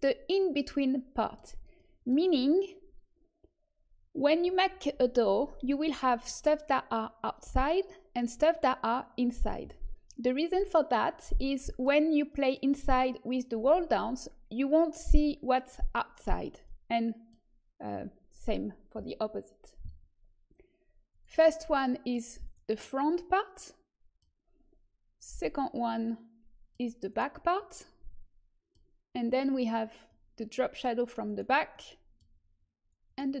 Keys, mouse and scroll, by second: 7.8-9.8 middle drag, 10.0-14.9 middle drag, 16.6-18.4 middle drag, 21.0-22.7 drag, 21.6-25.0 middle drag, 22.4 right click, 25.2-26.8 drag, 25.8-29.5 middle drag, 27.0-28.1 right drag, 29.5-31.7 drag, 30.2-33.4 middle drag, 30.2-31.7 right drag, 33.0 click, 33.0 right click.